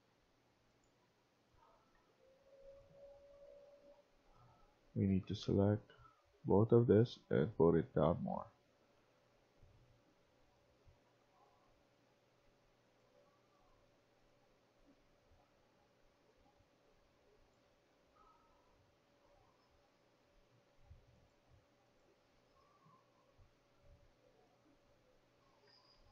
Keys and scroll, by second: 3.2-5.1 typing, 7.9-8.2 typing, 17.3-20.4 typing, 22.3 s, 25.6 Escape.